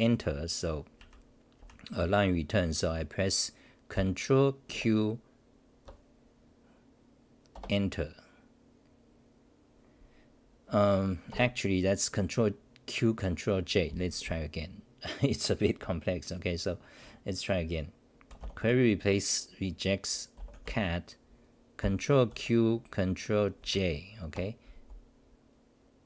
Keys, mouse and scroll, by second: 0.9 ctrl+=, 3.9-4.7 typing, 4.8 ctrl+\, 7.5 Return, 11.3 ctrl+g, 23.6 ctrl+\, 23.6 ctrl+j.